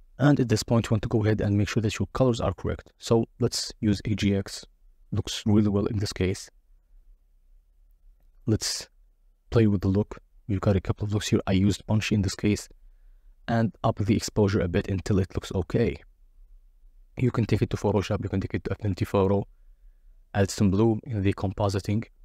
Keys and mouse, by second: 2.1-6.9 drag, 13.0-14.0 drag.